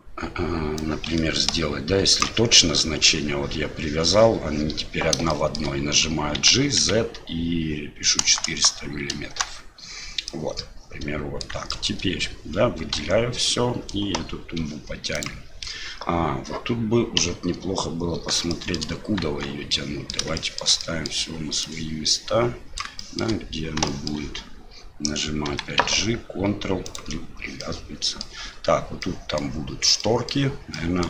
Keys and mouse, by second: 0.8-2.2 ctrl+drag, 5.4 shift+middle click, 10.3-11.5 middle drag, 11.8 shift+click, 12.9 l, 17.2 KP_Divide, 18.5 shift+click, 19.3 Tab, 19.7-20.1 drag, 20.3 shift+middle drag, 20.8 middle click, 21.6-22.8 drag, 23.1 shift+middle click, 23.9 shift+middle drag, 27.7-28.3 middle drag, 29.0-29.4 middle drag, 30.1 middle click, 30.7 middle drag.